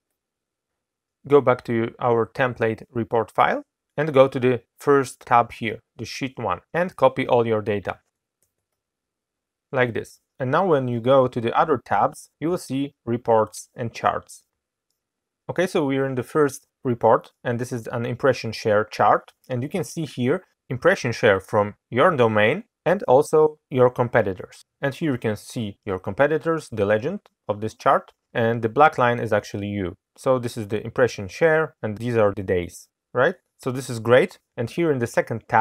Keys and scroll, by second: 8.3 ctrl+v.